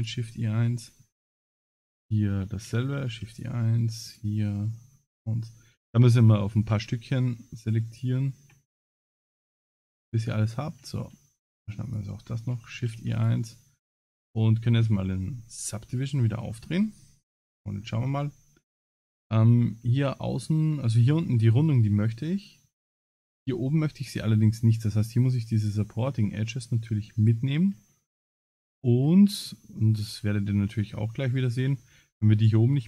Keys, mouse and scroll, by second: 0.3 middle click, 2.0 alt+shift+click, 2.8 shift+e, 4.1 alt+click, 4.9 alt+middle click, 5.5 middle click, 6.4 shift+middle click, 7.9 alt+shift+click, 8.5 middle click, 9.9 alt+shift+click, 10.4 shift+middle click, 11.8 shift+click, 12.7 shift+e, 13.5 middle click, 15.2-16.6 scroll up 19, 17.4 click, 17.4 scroll up 2, 18.2 middle click, 22.7 click, 23.9 click, 24.7 middle click, 25.6 click, 26.2 middle click, 27.2 shift+click, 27.9 middle click, 29.1 middle click, 29.9 shift+click, 30.3 middle click, 31.4 shift+click.